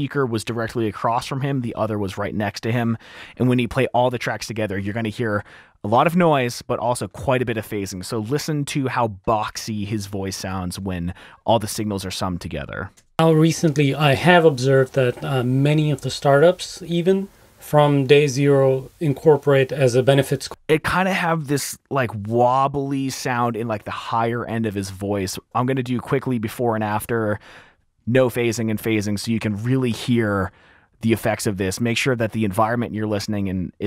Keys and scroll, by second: 13.2 space, 20.6 space, 26.2 s.